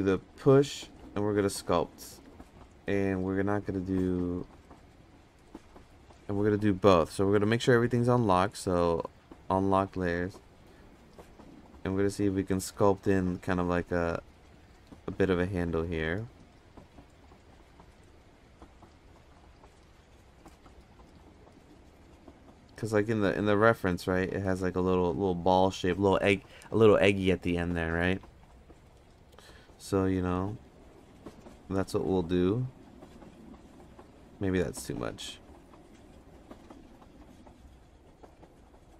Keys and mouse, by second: 1.7-2.3 drag, 1.7 f, 2.5 ctrl+z, 3.5 click, 4.4 click, 5.7 ctrl+z, 7.3 click, 8.2-9.4 drag, 10.2 click, 13.1 click, 15.8 f, 16.5 click, 17.3 f, 18.3 click, 20.5-21.2 middle drag, 21.8 click, 23.2 middle click, 24.2 middle drag, 27.7 middle click, 28.5-28.8 middle drag, 30.0 click, 32.1 click, 34.7 ctrl+z, 35.5 click, 38.4 Tab.